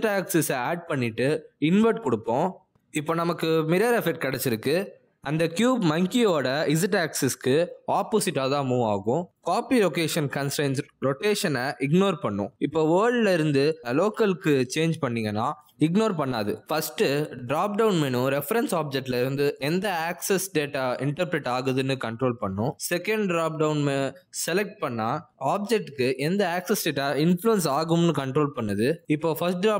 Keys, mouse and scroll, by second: 0.3-1.1 scroll up 3, 1.7 click, 3.1 click, 6.3 click, 6.7 g, 17.4 g, 18.8 click, 20.2 click, 22.4 click, 24.4 click, 29.3 click.